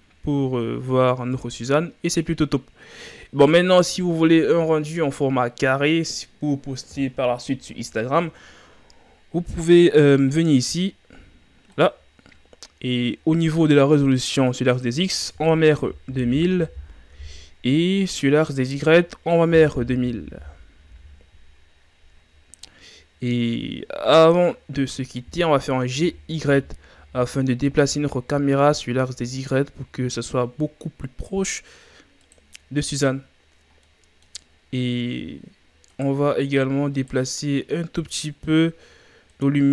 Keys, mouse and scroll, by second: 1.7-2.7 scroll up 1, 11.7 click, 14.7-16.3 drag, 16.3 KP_0, 18.5-19.9 drag, 19.9 KP_0, 20.5 KP_0, 22.8-24.0 scroll down 4, 26.0 g, 32.8-33.9 scroll down 11, 33.9-34.6 middle drag, 34.6-36.0 scroll down 13, 36.0-38.3 right drag, 39.4-39.7 middle drag.